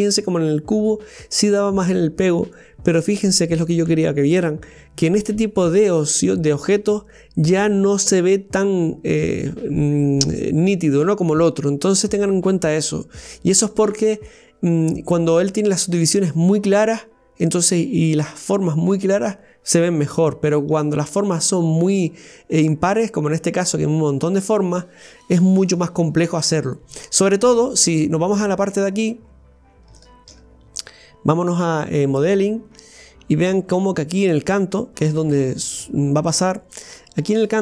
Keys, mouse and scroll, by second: 27.1 scroll up 1, 27.7-29.5 middle drag, 29.5 scroll down 1, 30.0-31.9 shift+middle drag, 32.4-33.8 scroll up 11, 33.8 middle click, 35.1-35.8 scroll up 7, 35.8 shift+middle click, 36.6 scroll up 2, 37.1 middle click.